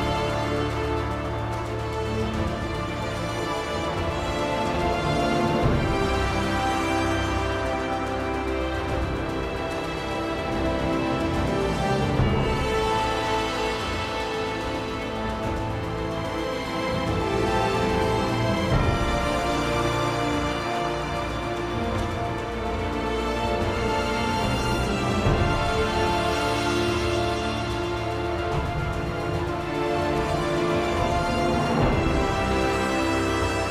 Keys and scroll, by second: 2.6-4.9 typing, 8.8 r, 10.4 r, 17.2 r, 31.8 r.